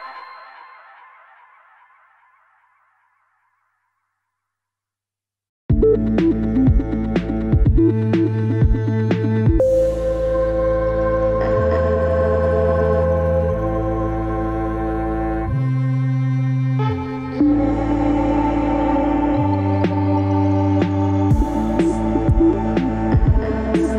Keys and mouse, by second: 0.2 alt+z, 0.7 e, 1.6 ctrl+z, 1.8 ctrl+z, 2.3 ctrl+z, 3.0 e, 6.2 ctrl+z, 6.6 ctrl+KP_Add, 6.8 ctrl+KP_Add, 7.8 ctrl+KP_Subtract, 7.8 ctrl+KP_Subtract, 8.7 ctrl+KP_Add, 8.8 ctrl+KP_Add, 9.2 ctrl+KP_Subtract, 9.5 ctrl+KP_Subtract, 9.8 ctrl+KP_Add, 10.5 ctrl+KP_Add, 11.1-12.7 middle drag, 13.6 alt+z, 13.8-14.2 drag, 14.4-15.6 ctrl+drag, 15.7 ctrl+click, 16.6 middle click, 17.1 middle click, 17.9 ctrl+click, 18.8 middle click, 19.0 Tab, 19.2 middle click, 19.4 Tab, 19.8 alt+z, 19.9-20.9 middle drag, 23.2 shift+d.